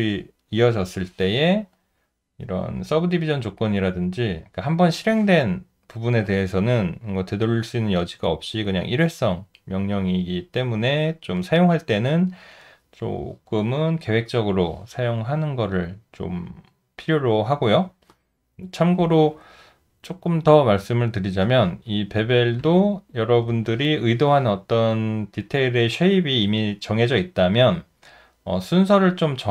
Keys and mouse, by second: 20.7 ctrl+z, 23.9 alt+middle click, 24.9 alt+click, 28.3 alt+right click, 29.1 alt+middle click.